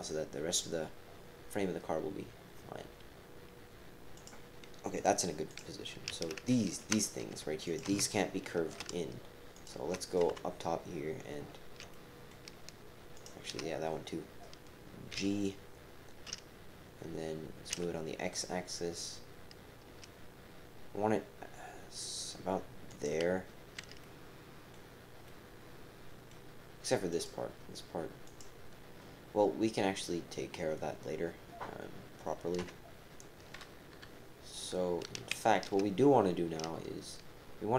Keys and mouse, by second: 4.9 click, 5.5 click, 6.8 shift+click, 7.6 shift+click, 8.8 typing, 9.5 shift+click, 10.3-10.9 typing, 11.9 shift+click, 12.3 shift+KP_7, 15.1 g, 24.0 click, 25.2-26.3 drag, 27.1 click, 28.3 click, 32.6 KP_7, 33.9 KP_7, 33.9 KP_3, 34.1 middle click, 35.3 shift+middle click.